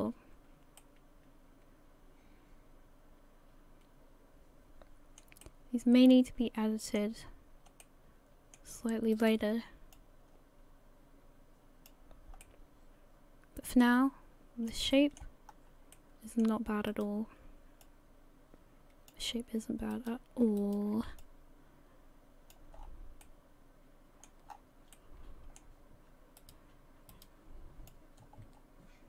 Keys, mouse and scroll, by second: 0.8 middle click, 5.1 middle click, 5.4 middle click, 7.3 scroll up 2, 7.8 middle click, 8.2 middle click, 9.1 right click, 9.9 click, 12.4 middle click, 14.9 shift+middle click, 15.5-15.9 scroll up 1, 15.9 middle click, 16.9 right click, 17.8 click, 19.9 right click, 20.6 shift+right click, 21.2 click, 22.8 scroll down 6, 23.2 middle click, 24.5-24.9 scroll up 6, 24.9 middle click, 26.4 right click.